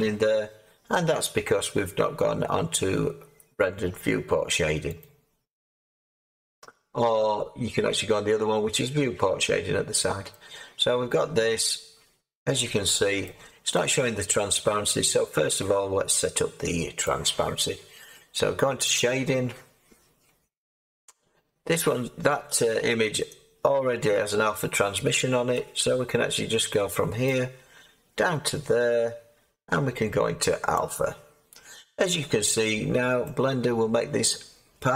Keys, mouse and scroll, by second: 13.2-18.9 middle drag, 18.9-25.5 drag, 25.5-30.7 middle drag, 30.7-32.1 drag, 32.1-34.9 middle drag.